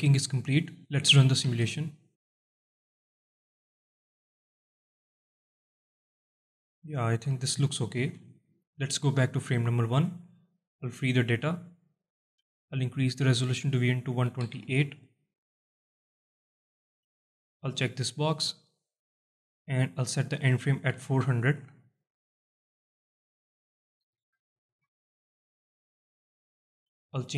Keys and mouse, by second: 2.5 space, 8.1 space, 8.5 shift+Left, 12.9-15.5 drag, 20.3-22.4 drag, 21.5 KP_0, 23.6-25.5 drag.